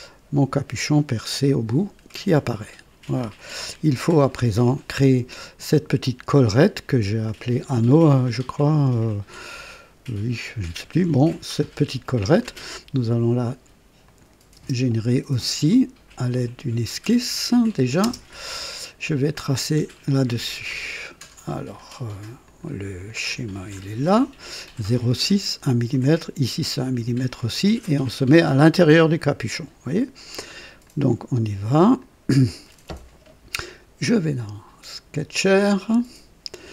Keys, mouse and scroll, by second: 3.9 KP_2, 8.2 right click, 12.4-12.7 scroll up 1, 14.1 click, 14.6 space, 16.3 click, 17.5 click, 18.0 typing, 20.6-21.0 scroll up 1, 21.2 right click, 22.5 click, 23.4 scroll down 1, 30.8 click, 32.0 click, 34.0 click, 35.9 click.